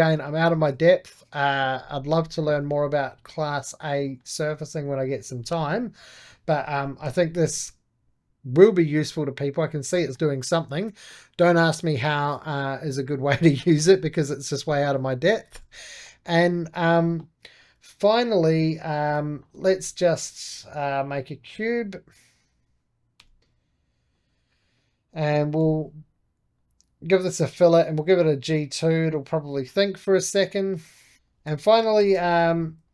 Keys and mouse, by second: 0.0-6.5 middle drag, 6.5-9.0 drag, 9.8-13.0 middle drag, 15.9-17.5 middle drag, 17.5 Escape, 18.1 3, 18.5 4, 18.8 click, 19.4 shift+x, 21.3-23.1 drag, 23.1 c, 23.4 2, 24.0-25.5 drag, 25.5 b, 26.5-30.4 drag, 30.4 middle click, 31.1 3, 31.2 click, 31.9 shift+x, 32.8 click.